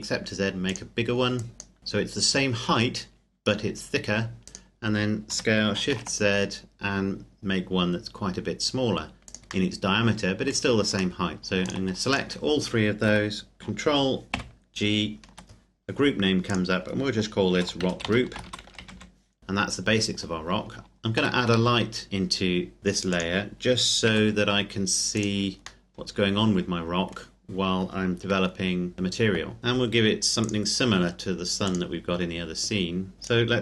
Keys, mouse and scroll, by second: 0.9 click, 4.6 right click, 5.4 s, 6.0 shift+z, 9.3 click, 9.7 middle click, 11.4 click, 11.7 shift+right click, 14.4 ctrl+g, 16.5 click, 17.6-18.9 typing, 19.4 middle click, 21.3 shift+a, 22.8 g, 23.2 click, 24.1 r, 25.2 click, 25.9 middle click, 28.2 g, 28.9 click, 29.6 KP_Enter, 30.6 click, 33.1-33.5 scroll up 1, 33.5 right click.